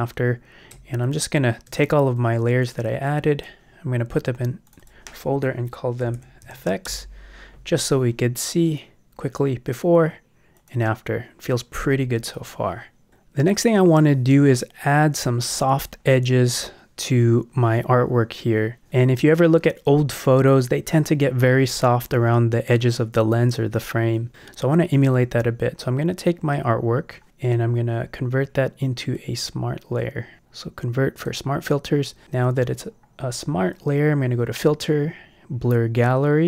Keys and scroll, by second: 6.1 shift+f, 6.4 shift+x, 6.8 shift+Return, 7.8 Return.